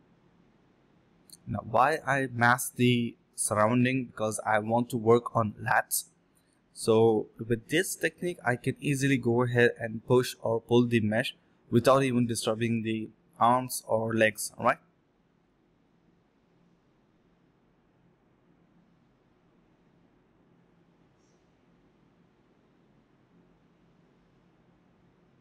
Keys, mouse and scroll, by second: 0.0-1.4 typing, 2.8 alt+click, 3.8 double click, 4.0 alt+click, 8.2 alt+click, 8.8 typing, 10.1 typing, 11.1 alt+click, 12.8 double click, 13.2 alt+click, 13.6 alt+click, 14.3 alt+click, 15.1 ctrl+b, 15.5 double click, 15.6-16.0 typing, 16.3 double click, 16.6 shift+click, 16.7 shift+double click, 17.2 alt+double click, 18.8 double click, 20.9 double click, 23.1 alt+click, 23.7 double click.